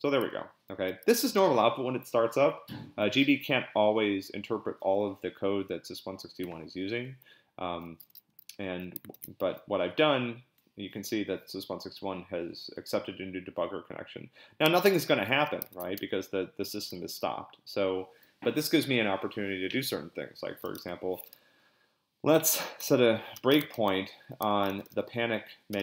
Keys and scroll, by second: 9.1 ctrl+b, 9.4 n, 15.7 ctrl+b, 16.0 p, 20.6 b, 22.5-25.4 typing, 25.7 Return.